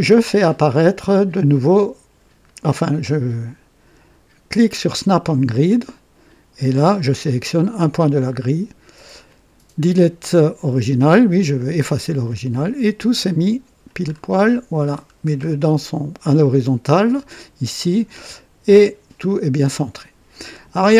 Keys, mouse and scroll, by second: 5.0 click, 8.2 click, 11.9 click, 14.1-15.6 scroll down 7.